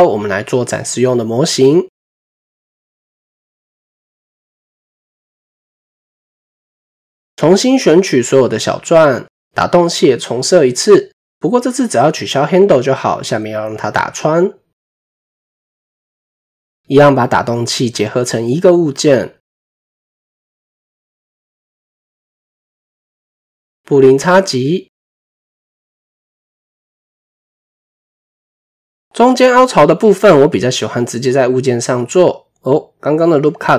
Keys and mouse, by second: 0.6 click, 0.7 typing, 2.3 typing, 5.7 click, 6.8 typing, 7.8 click, 9.8 click, 10.2-10.6 middle drag, 11.8 click, 13.1-15.0 middle drag, 15.6 KP_7, 16.6 typing, 18.3-19.8 drag, 22.5 middle drag, 25.0 ctrl+KP_Subtract, 25.5 middle drag, 27.2 KP_7, 28.3 shift+middle drag, 29.9 Tab, 30.2 middle click, 31.4 middle click, 32.8 middle click, 32.9 typing.